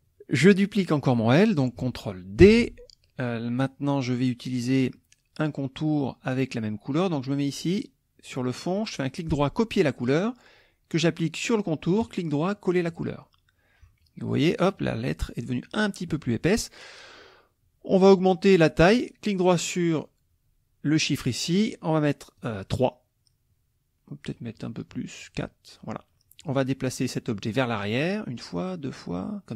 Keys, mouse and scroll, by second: 2.4 ctrl+d, 8.7 right click, 9.9 click, 12.0 right click, 12.9 click, 18.9 right click, 22.4 click, 24.3 right click, 25.2 click, 27.5 click, 28.6 click.